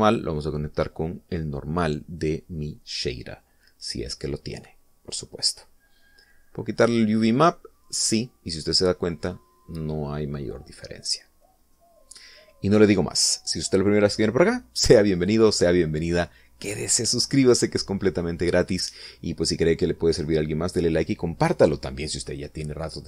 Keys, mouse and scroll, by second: 0.5 click, 8.8 click, 13.4 middle click, 14.5 scroll down 1.